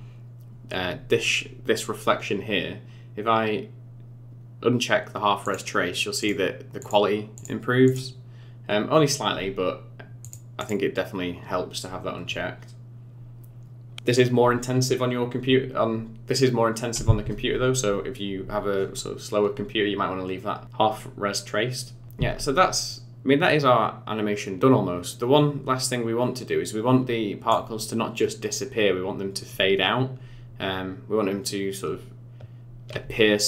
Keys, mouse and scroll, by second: 5.5 click, 6.2 click, 6.8 click, 7.4 click, 7.9 click, 10.2 click, 10.6 click, 22.0 space, 22.2 space, 22.9 click.